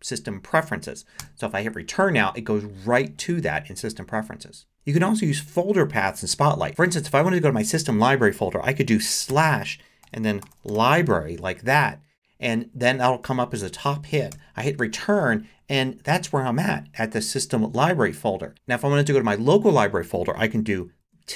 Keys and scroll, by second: 1.2 Return, 6.7 BackSpace, 9.3-11.4 typing, 14.3 Return, 18.5 BackSpace, 21.0 shift+`.